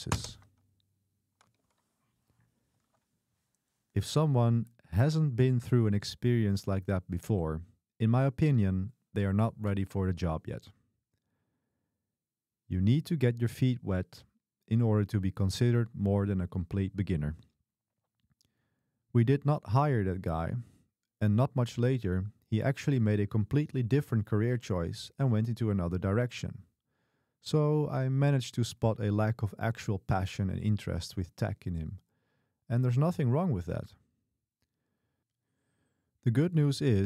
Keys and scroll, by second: 0.4 super+v, 3.6 Escape, 4.6 q, 6.1-6.9 typing, 8.4 typing.